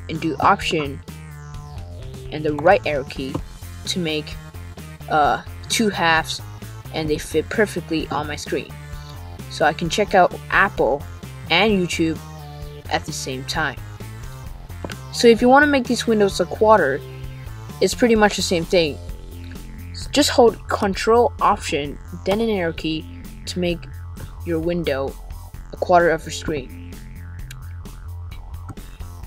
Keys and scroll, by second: 0.6 alt+Right, 20.3 ctrl+alt+Left.